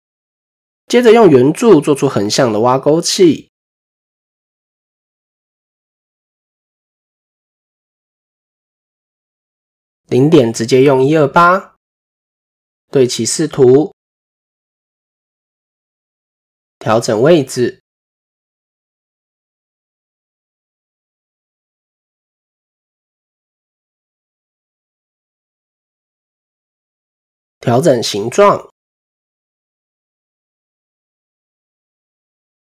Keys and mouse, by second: 0.0-0.5 shift+middle drag, 1.8 shift+middle drag, 4.6 shift+a, 7.7 KP_1, 8.8 shift+middle drag, 9.7-11.7 drag, 12.8 click, 15.0 click, 15.4 Tab, 16.0 KP_7, 17.3-18.3 drag, 18.8 s, 20.9-22.3 drag, 23.5 KP_3, 25.4 shift+middle click, 26.8 s, 29.0-31.0 drag.